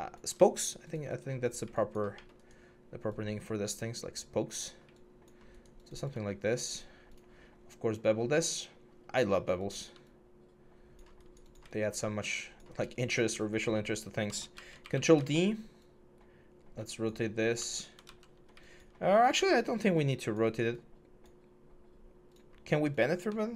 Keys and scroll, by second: 14.3 ctrl+d, 14.6 e, 17.3 w, 17.8 ctrl+z, 23.4 ctrl+d.